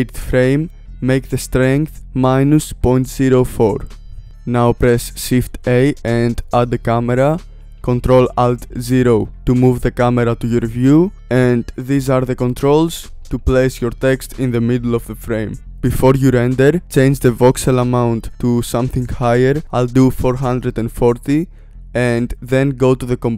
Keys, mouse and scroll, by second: 0.6-2.4 drag, 6.3 shift+a, 8.2 KP_0, 11.1 g, 13.3 click, 13.9 g, 14.7 g, 16.7 space, 17.4 click, 18.0 KP_4.